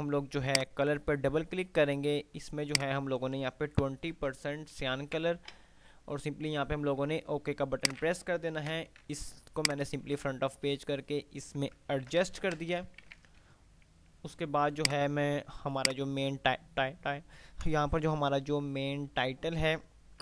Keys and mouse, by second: 5.0 Tab, 8.0 click, 8.8 shift+Page_Up, 9.8 shift+click, 12.3 ctrl+g, 12.6 Delete, 13.1 ctrl+z, 13.6 F3, 15.0-20.1 drag.